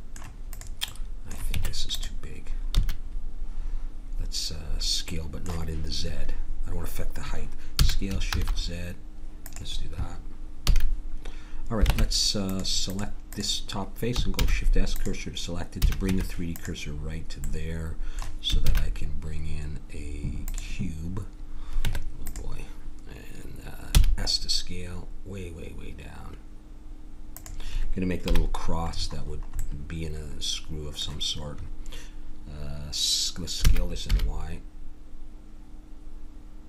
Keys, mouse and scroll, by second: 0.5-2.7 drag, 1.5 Tab, 2.7 a, 7.7 s, 10.7 a, 11.9 ctrl+Tab, 14.3 shift+s, 15.7 a, 16.0 Tab, 18.6 shift+a, 21.8 Tab, 23.9 s, 28.2 KP_Decimal, 30.0 middle click, 33.6 s.